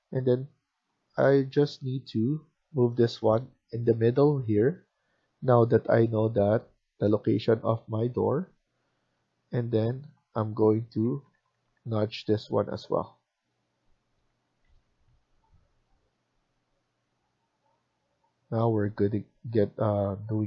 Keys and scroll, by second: 1.5 Left, 1.6-4.8 Left, 6.6 Right, 6.8 Right, 8.7 Escape, 8.9 Escape, 10.9 Left, 11.2 Left, 14.3 Escape, 14.7 Escape.